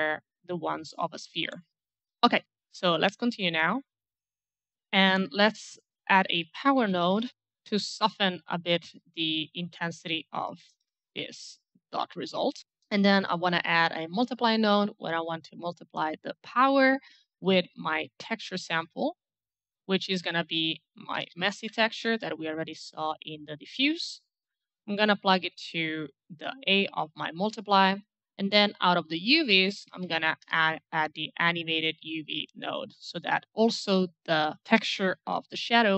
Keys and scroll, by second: 2.4 Delete, 6.4-7.6 typing, 10.4 KP_5, 10.6 Return, 13.4 alt+m, 18.0-19.1 typing, 20.7-22.8 typing, 29.3-30.4 typing, 30.5 Return.